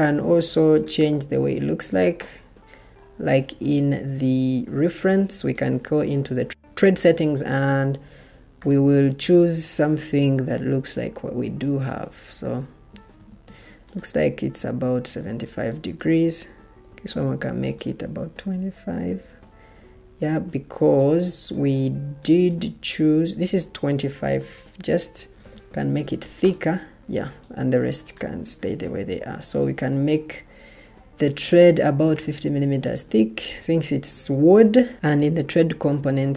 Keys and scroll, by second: 13.1 typing, 16.5-17.3 typing, 25.0-25.8 typing.